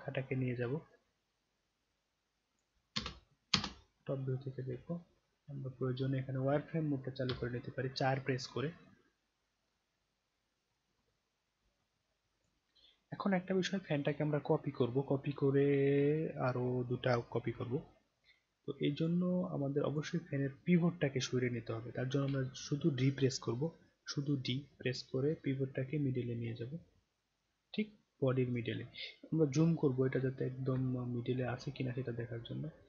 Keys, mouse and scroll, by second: 0.9-2.6 drag, 3.5 space, 3.9 middle click, 4.3 middle click, 4.9-5.3 alt+middle drag, 8.9-9.8 scroll down 3, 9.8 scroll up 1, 10.7-12.4 drag, 13.0-13.6 scroll down 4, 13.6 scroll up 1, 18.9 click, 19.9 click, 22.2 d, 24.2 middle click, 25.8-28.6 drag, 28.8 scroll down 1, 29.6 alt+scroll up 1, 29.7 alt+middle drag, 30.2-30.6 scroll up 1, 30.9 alt+scroll up 1, 31.0-31.5 alt+middle drag, 31.7 scroll up 1.